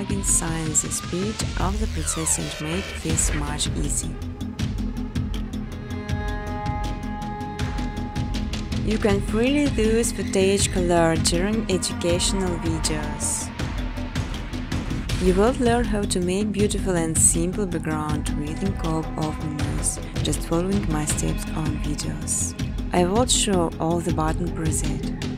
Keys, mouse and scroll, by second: 0.2 click, 0.8-2.2 typing, 2.8 click, 3.0 click, 3.7 v, 4.3 click, 4.5 click, 5.8-6.7 scroll, 7.3 click, 7.6 click, 9.3 click, 11.7 click, 12.9 click, 13.5 click, 14.1 click, 14.7 click, 15.5 9, 15.7 9, 16.0 click, 18.7 click, 24.9 click.